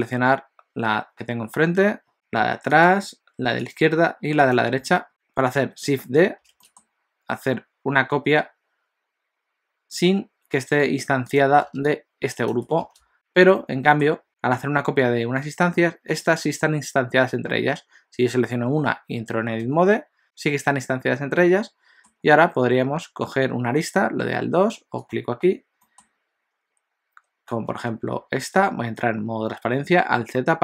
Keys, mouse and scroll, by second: 2.1 middle click, 2.8 shift+click, 3.8 shift+click, 4.5 shift+click, 5.0 middle click, 6.6 shift+d, 13.6 middle click, 16.1 click, 19.6 Tab, 21.4 middle click, 22.9 2, 25.1 click, 25.8 middle click, 26.0-27.6 scroll up 3, 28.2 alt+z.